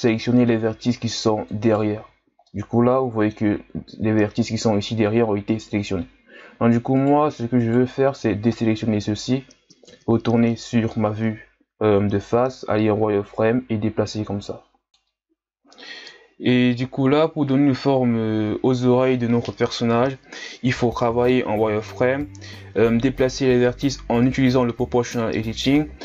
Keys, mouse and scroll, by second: 1.9 z, 2.1-2.5 scroll down 2, 2.5-5.4 middle drag, 6.1-6.9 scroll up 2, 6.9 shift+right click, 7.5 shift+right click, 9.9 KP_1, 12.3 z, 13.3-15.6 drag, 15.6 scroll down 2, 15.8-16.7 scroll up 4, 16.7 z, 16.9 right click, 17.2 c, 17.7 shift+scroll up 3, 17.9-19.1 drag, 19.6 z, 19.7-20.3 scroll down 7, 20.3 Tab, 20.8-21.8 scroll up 5, 21.8 z, 22.2 right click, 22.3 c, 22.8 g, 23.4 z, 23.5 scroll down 2, 23.8 scroll up 1, 23.8 Tab, 24.3 scroll up 1, 24.5 Tab, 25.1 z, 25.4 right click, 25.4 c.